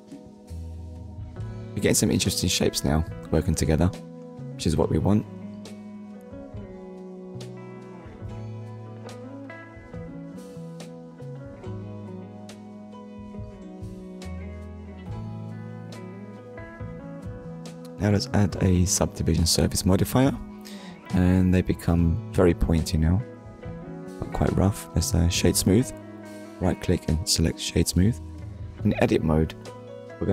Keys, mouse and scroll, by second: 1.7 scroll down 1, 2.2 shift+middle click, 2.9 click, 4.9 click, 5.3 middle click, 6.7-7.1 scroll down 2, 7.2 shift+middle click, 7.7 middle click, 8.3 scroll up 1, 9.4 ctrl+s, 10.0 shift+middle click, 10.5 middle click, 11.2 click, 12.7 Tab, 13.3 Tab, 16.3 click, 17.7 click, 19.0 click, 22.7 middle click, 23.7 right click, 24.2 click, 25.0 scroll up 1, 25.9 Tab, 28.5 Tab.